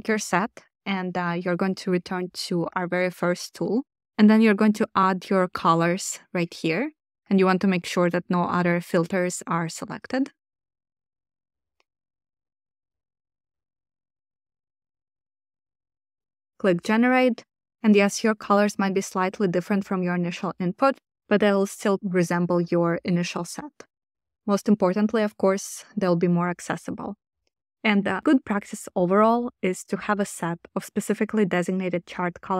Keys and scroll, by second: 3.7 super+v, 12.0 super+c, 13.4 super+v.